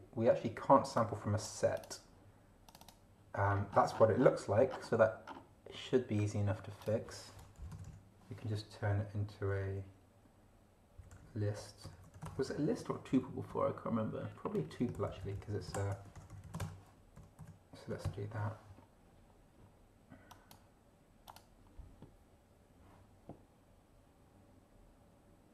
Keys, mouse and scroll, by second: 1.0 click, 1.8 click, 2.7 click, 3.5-4.4 scroll up 2, 5.3 scroll down 2, 6.8 click, 7.6 Left, 10.7-13.0 typing, 13.1 shift+Down, 13.5 shift+End, 14.5 Up, 15.6 ctrl+shift+Left, 16.1 ctrl+shift+t, 16.2 ctrl+shift+u, 16.3 ctrl+shift+p, 16.5 ctrl+shift+e, 16.5 ctrl+shift+space, 16.6 ctrl+shift+BackSpace, 17.2 ctrl+shift+End, 17.4 Down, 18.1 shift+0, 20.3 click, 21.3 click.